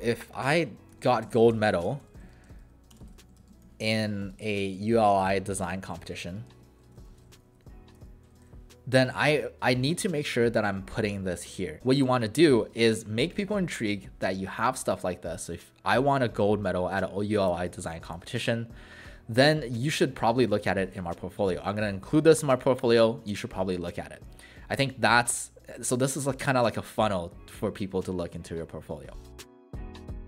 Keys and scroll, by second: 0.6-8.0 typing, 12.0 Delete, 29.4 Delete.